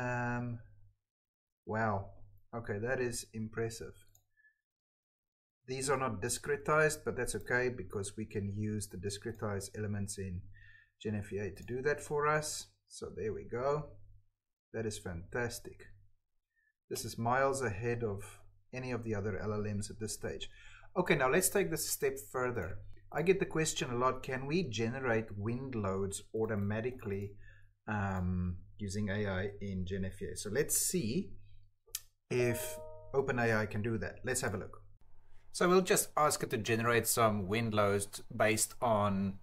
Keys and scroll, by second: 7.3 Escape, 15.6 Escape, 34.8-39.4 typing.